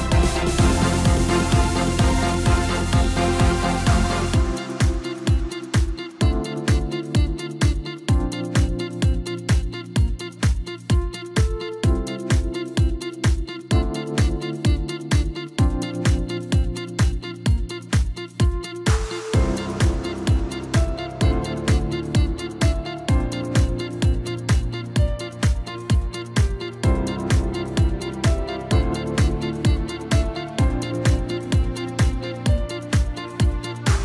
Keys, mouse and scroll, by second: 1.1 click, 11.8-12.4 scroll up 1, 12.4-13.9 scroll down 2, 13.9-14.4 scroll up 1, 15.8 click, 17.3 drag, 17.9-19.3 scroll up 3, 21.4-22.5 scroll up 1, 22.5 scroll down 1, 23.9-24.9 drag, 25.6 click, 26.8 click, 33.3 click.